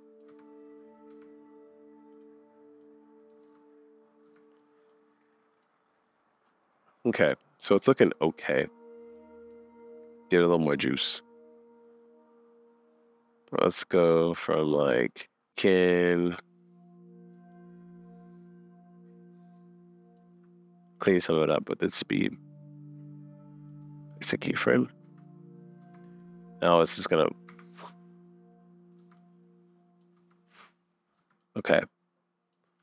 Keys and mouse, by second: 0.0 click, 0.3 space, 1.1 space, 2.1 click, 2.8 click, 3.4 space, 4.3 space, 5.3 click, 9.1 click, 10.7-12.2 shift+middle drag, 14.2-15.5 shift+middle drag, 17.5-19.4 shift+middle drag, 25.0 space, 25.8 space, 26.2 click, 27.5 space, 29.0 space, 29.2-30.0 drag, 30.1 space, 31.2 space, 31.4 click, 31.9 click.